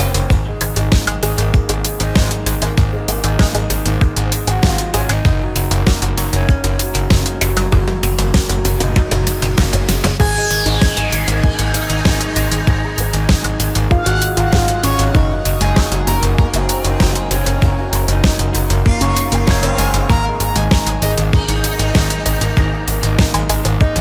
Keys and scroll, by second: 0.4 ctrl+g, 1.4 ctrl+g, 4.6 f, 7.1 space, 11.7 p, 14.3 space, 15.2 Delete, 22.5 f.